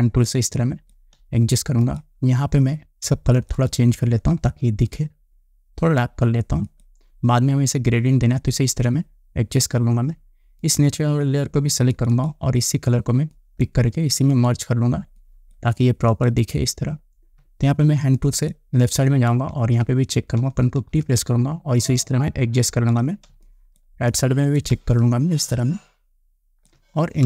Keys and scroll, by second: 0.0 space, 18.6 space, 21.4 ctrl+t, 23.9 space.